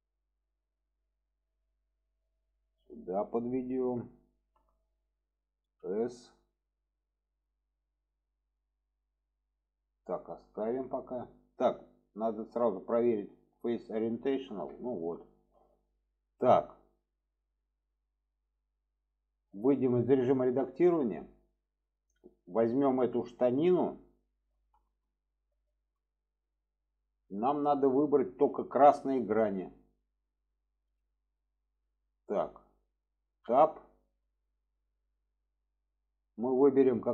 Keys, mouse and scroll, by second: 2.6 click, 4.3 shift+middle click, 8.2-9.3 drag, 10.2 shift+middle click, 11.9-14.0 drag, 14.8 shift+middle click, 15.2 middle click, 16.9-18.4 middle drag, 20.4 Tab, 20.9 middle drag, 22.6 click, 23.2-23.7 middle drag, 24.8 shift+middle click, 27.4 shift+middle drag, 28.4-29.9 middle drag, 30.5-31.2 middle drag, 32.0 shift+middle click, 33.4 Tab, 34.5-34.8 middle drag, 35.8-36.3 middle drag.